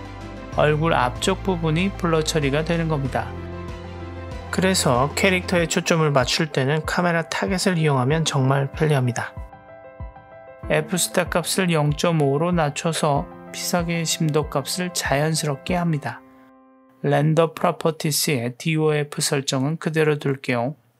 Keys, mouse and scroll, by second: 3.2 click, 5.5 click, 6.8 click, 9.7-11.2 drag, 17.2 click, 20.5 click.